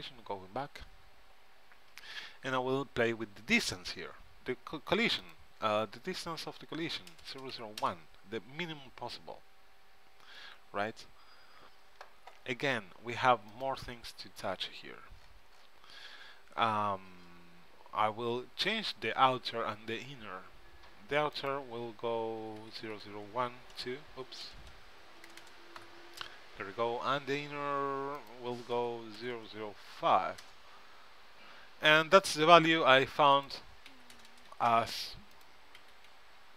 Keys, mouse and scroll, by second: 5.3-7.1 drag, 7.4 KP_0, 13.6-15.4 drag, 15.4-17.6 middle drag, 21.5-24.7 drag, 22.9 KP_Decimal, 24.7 BackSpace, 25.5 KP_0, 28.3-30.0 drag, 29.4 KP_0, 32.3-35.3 drag, 34.4 KP_0, 35.5-36.5 drag.